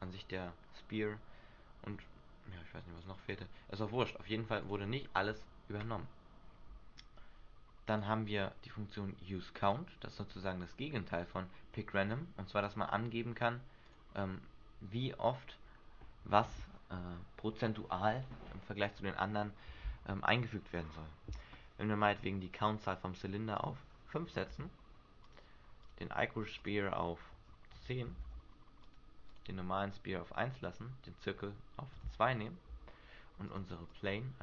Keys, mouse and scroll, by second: 3.2 click, 4.8 click, 8.1 click, 9.8 click, 12.7 scroll down 2, 14.0 click, 14.0-15.3 scroll down 4, 15.3 scroll up 1, 23.7 click, 26.0 click, 26.8 click, 29.6 click, 30.7 click, 32.1 click, 34.1 click.